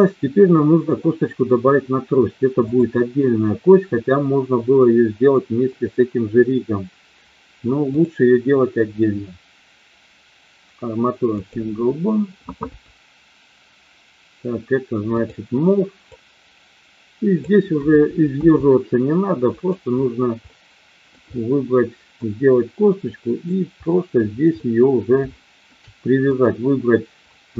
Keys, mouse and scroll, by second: 2.5 click, 7.8-11.7 drag, 15.0 click, 16.0-17.4 drag, 18.3 s, 19.5 click, 20.4-21.2 middle drag, 22.3-23.5 drag, 24.7-25.0 middle drag, 25.3-25.8 shift+middle drag.